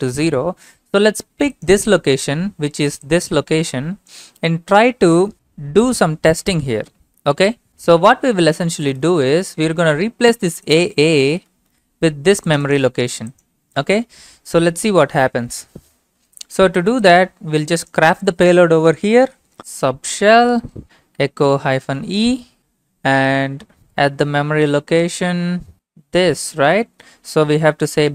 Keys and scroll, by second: 19.6-19.9 typing.